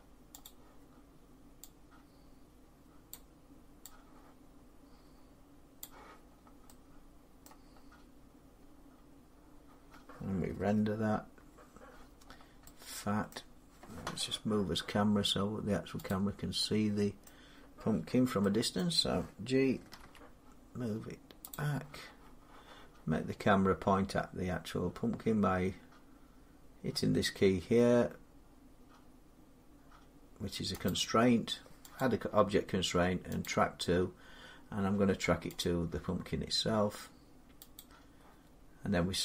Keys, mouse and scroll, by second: 0.3 click, 2.9 click, 5.6 click, 6.1-6.5 scroll down 4, 7.3 middle click, 7.5 middle click, 7.6 middle click, 7.6-8.4 scroll up 2, 8.4 scroll up 1, 12.1 scroll down 2, 13.2 middle click, 15.9 click, 16.5 scroll, 17.1 middle click, 18.6 middle click, 19.8 g, 21.3 click, 30.7 click, 31.8 click, 33.4 click, 35.7 click, 37.6 click.